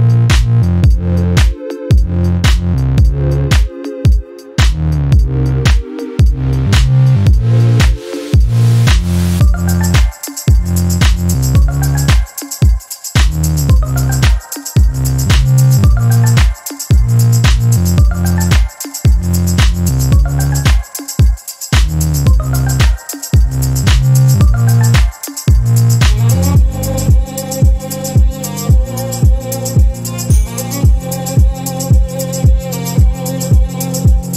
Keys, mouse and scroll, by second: 1.6 ctrl+click, 2.9 click, 5.5 click, 10.1 click, 11.6 click, 13.4 click, 14.8 Delete, 16.7 click, 18.2 click, 19.3 Delete, 21.1 click, 21.9-23.5 drag, 24.3 click, 25.3 KP_2, 25.5 KP_0, 25.9 KP_Enter, 28.1 click, 29.1 click, 30.6 click, 31.1 click, 32.0 click, 33.1 Delete.